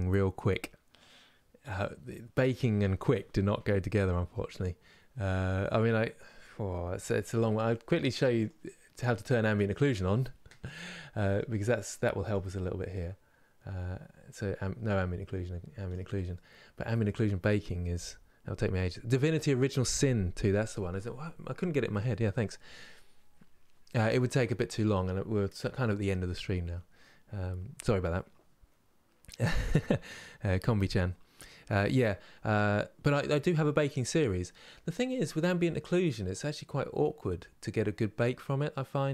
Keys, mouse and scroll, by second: 9.1 click, 10.3-12.7 middle drag, 12.7-16.0 drag, 16.0-39.1 middle drag.